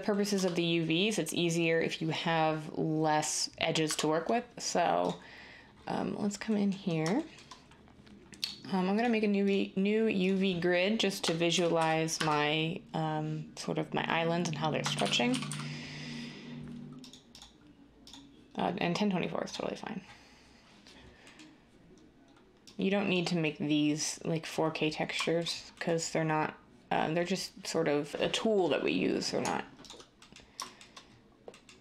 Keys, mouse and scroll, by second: 0.3 Tab, 3.8 Tab, 11.5 typing, 14.7-15.4 typing.